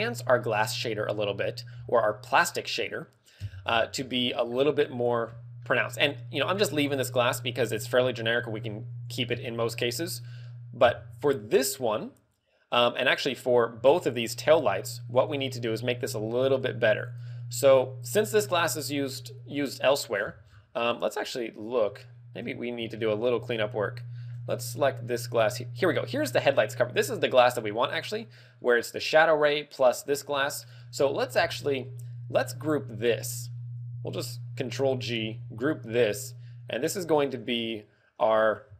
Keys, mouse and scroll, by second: 3.3 Tab, 3.8-4.6 scroll up 5, 4.6 click, 5.1-5.5 scroll up 2, 5.5 middle click, 8.4-8.9 scroll down 5, 8.9 click, 9.3 Tab, 9.7-10.1 scroll down 2, 10.8 Tab, 12.7 click, 14.3 click, 15.1 click, 16.4 click, 17.0 click, 17.9 click, 20.0-20.7 scroll down 17, 20.8 scroll up 3, 21.1 middle click, 21.5 scroll up 4, 21.9 shift+middle click, 22.4-22.8 scroll up 3, 22.8 shift+middle click, 24.8 right click, 27.9 scroll down 1, 30.1-30.5 scroll down 1, 30.5 middle click, 30.9 a, 31.3 b, 35.2 ctrl+g, 35.8-36.4 scroll up 8, 36.8 click.